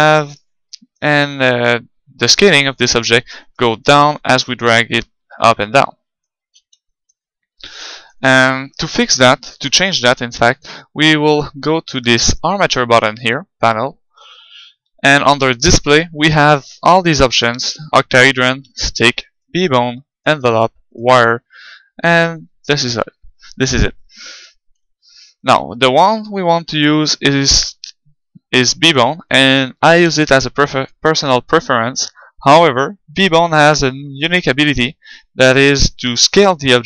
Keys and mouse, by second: 0.8-2.4 middle drag, 3.4-5.2 right drag, 3.8-5.6 drag, 6.4 ctrl+z, 6.9-9.5 middle drag, 8.7-11.0 right drag, 13.0-14.8 drag, 18.7-22.7 drag, 24.5-26.3 middle drag, 27.0-30.4 drag, 29.3 middle click, 30.4-32.5 middle drag, 34.3-36.2 right drag.